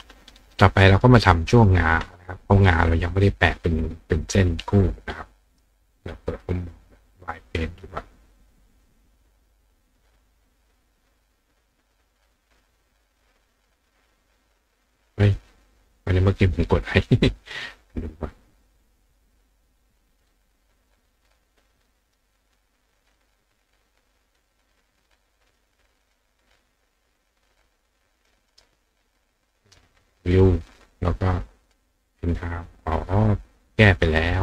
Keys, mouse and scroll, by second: 0.9 click, 1.6 click, 6.3 click, 11.6 click, 18.6 click, 22.0 click, 25.4 click, 26.0 click, 26.8 click, 28.2 click, 28.5 right click, 30.3 click, 31.6 click, 33.9 click.